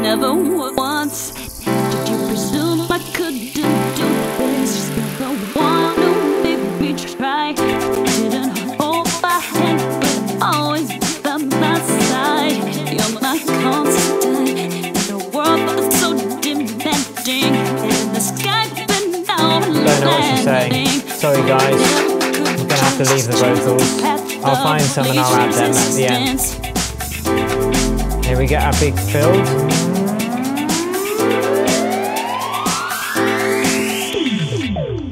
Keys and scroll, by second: 27.5 BackSpace.